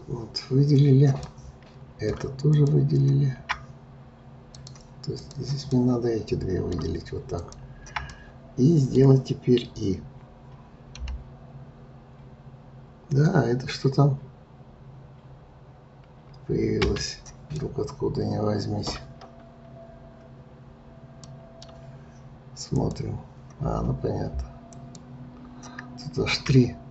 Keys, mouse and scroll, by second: 1.2-2.5 middle drag, 2.5 shift+click, 4.5 click, 5.7-7.3 middle drag, 7.3 shift+click, 8.1-11.0 middle drag, 17.5-19.2 middle drag, 19.2-21.2 scroll up 4, 21.2-22.7 middle drag, 22.7 click, 24.7 click, 26.0-26.9 scroll up 1.